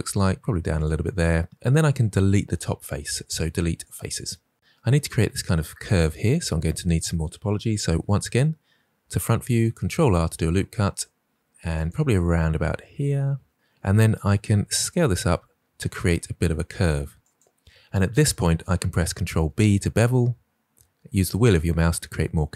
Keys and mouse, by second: 0.7 click, 1.5 ctrl+r, 3.1 Delete, 7.8 KP_1, 9.7 ctrl+r, 11.7 click, 14.4 s, 17.2 click, 19.2 ctrl+b.